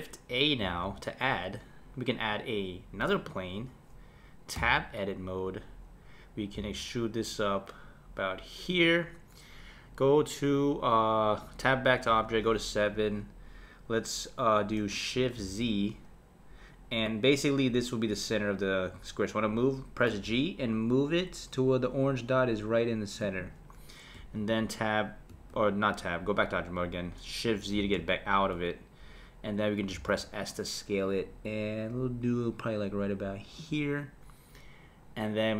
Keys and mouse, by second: 0.6 shift+a, 4.5 Tab, 6.5 e, 11.4 Tab, 12.0 KP_7, 15.5 shift+z, 20.0 g, 24.2 Tab, 25.3 Tab, 27.8 shift+z, 29.9 s.